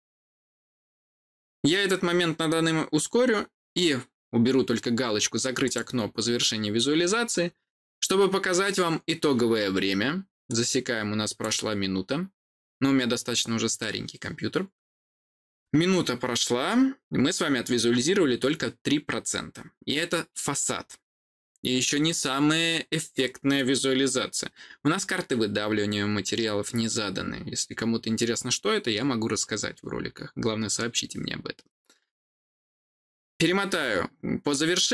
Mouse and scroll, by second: 5.5 click, 10.4 click.